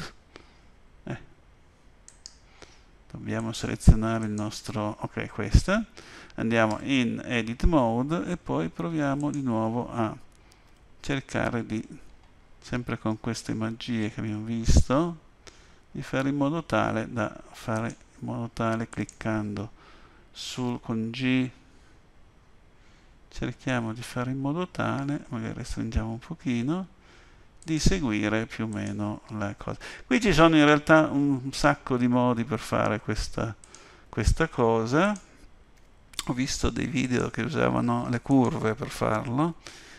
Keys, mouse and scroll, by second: 2.1 right click, 4.2 click, 6.7 Tab, 9.2 click, 10.7 g, 18.9 click, 20.7 g, 28.7 click, 29.6 g, 35.0 click, 35.7 g, 38.3 click, 39.6 g.